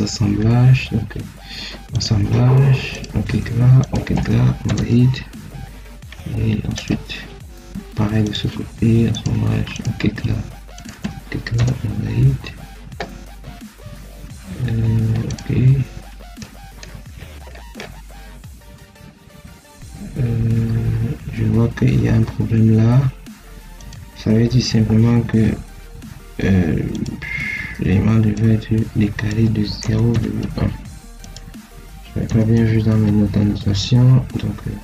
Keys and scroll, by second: 16.0 Caps_Lock, 29.7 0, 30.0 ., 30.3 1, 32.1 0, 32.4 ., 32.8 1.